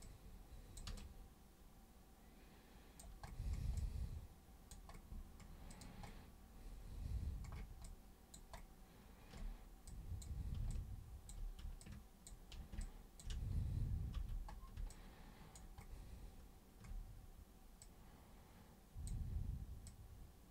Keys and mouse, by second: 0.0 super+click, 0.9-3.0 alt+super+drag, 3.8 alt+super+click, 5.7 alt+super+click, 7.8 alt+super+click, 9.9 super+click, 10.7-11.3 alt+super+drag, 11.8-12.3 ctrl+super+drag, 12.8 ctrl+shift+super+click, 14.2 super+b, 14.9 alt+super+click, 17.8-19.1 super+drag, 19.8 super+click.